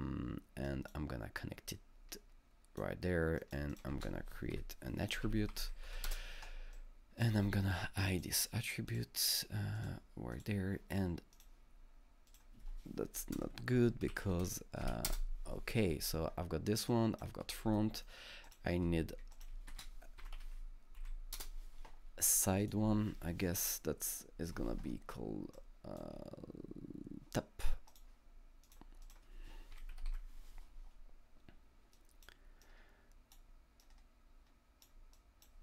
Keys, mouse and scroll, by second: 0.7 click, 1.7-4.5 drag, 3.9 ctrl+space, 4.5-6.1 typing, 6.7 click, 6.8-8.9 drag, 8.9 click, 9.8 click, 10.4 click, 11.3 click, 13.8 Left, 14.1 shift+Right, 14.8 f, 15.1 Return, 15.2 f, 16.9 click, 17.8 alt+middle click, 18.5 click, 19.3 double click, 19.7 ctrl+space, 20.0-20.9 typing, 21.0 Up, 21.4 Return, 23.2 Return, 23.2 Up, 23.2 click, 25.5-28.6 drag, 25.9 Return, 28.6 click, 29.0 click, 29.5-30.6 typing, 32.0 click, 32.5-33.2 typing, 32.6-35.6 drag.